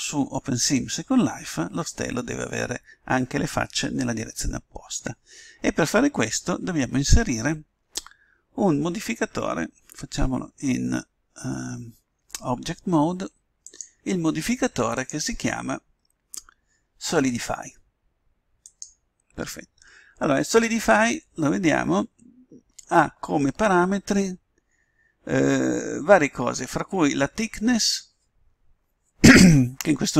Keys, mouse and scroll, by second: 10.0 Tab, 13.6-16.6 drag.